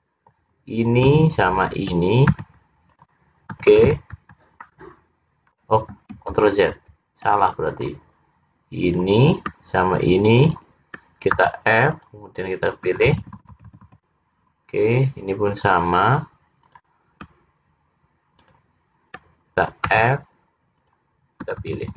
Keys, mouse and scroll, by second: 1.4 shift+click, 2.5 f, 3.0 click, 3.6-4.0 f, 4.2 f, 4.7 middle click, 6.5 ctrl+z, 6.9 ctrl+z, 7.8 click, 8.9 click, 10.4 shift+click, 11.0 shift+click, 11.5 f, 12.0 click, 13.0 f, 13.2 f, 15.8 click, 16.7 click, 18.5 shift+click, 19.2 shift+click, 20.0 f, 20.8 click, 21.8-21.9 f.